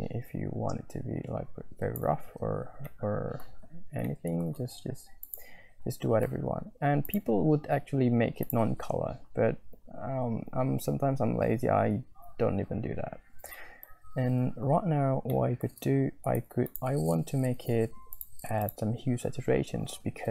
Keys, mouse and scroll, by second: 2.9 click, 3.0 middle click, 4.2 shift+middle click, 5.3 click, 7.3 right click, 7.4 click, 7.9 click, 8.0 right click, 11.3 click, 13.6 shift+middle click, 15.5 middle click, 16.3 shift+a.